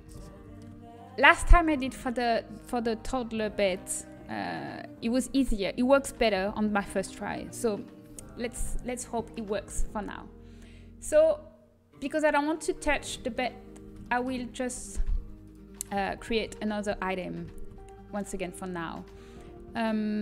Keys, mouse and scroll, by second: 1.3-3.8 middle drag, 9.4 middle click, 10.1 Tab, 11.1-12.2 middle drag, 13.8-15.4 middle drag, 16.0-17.1 drag, 17.8 shift+a.